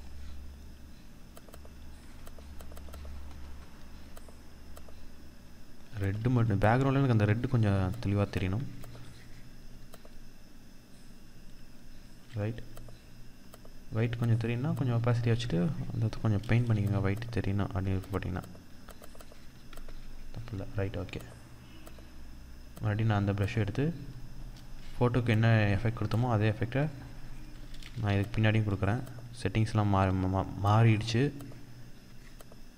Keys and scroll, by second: 5.6 ctrl+-, 16.1 ctrl+z, 27.4 ctrl+z.